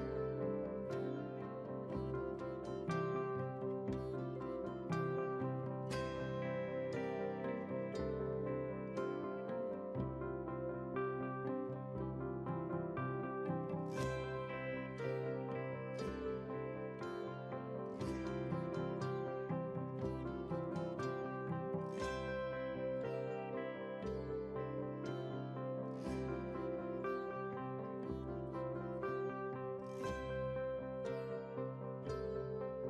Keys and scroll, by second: 0.4 ctrl+q.